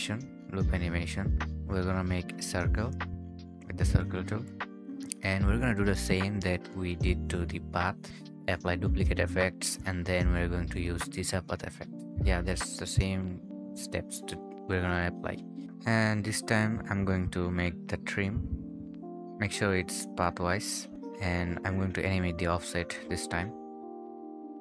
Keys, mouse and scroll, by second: 6.0 right click, 6.8 Return, 7.0-8.0 typing, 7.9 scroll down 1, 8.5 right click, 9.1 Return, 9.7-10.5 typing, 11.2 scroll down 1, 11.3 scroll up 1, 11.6 right click, 11.9 scroll up 1, 12.7-13.9 typing, 14.3 Escape, 14.4 right click, 14.9 double click, 15.0 right click, 15.5 scroll up 1, 15.6 typing, 15.7 Return, 17.7-18.6 typing, 18.6 Return.